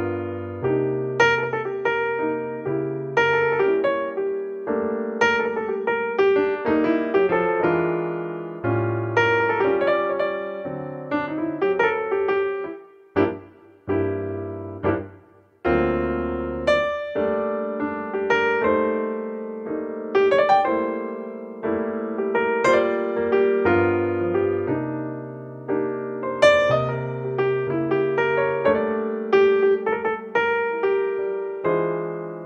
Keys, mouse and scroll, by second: 0.5 middle click, 0.7 middle click, 1.6 KP_0, 1.7 middle click, 3.3 alt+r, 6.7-10.7 drag, 10.1 middle click, 10.8 click, 12.8-14.7 right drag, 14.4-16.4 drag, 15.4-17.0 right drag, 16.0 middle click, 16.9 click, 17.0-20.0 middle drag, 20.0-27.7 drag, 29.6-31.7 drag.